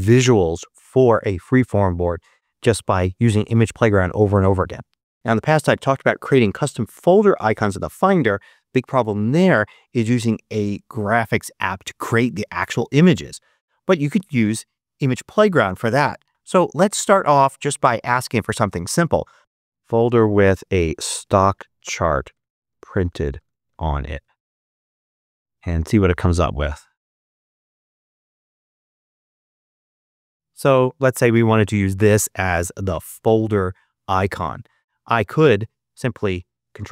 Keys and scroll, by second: 19.1-24.2 typing.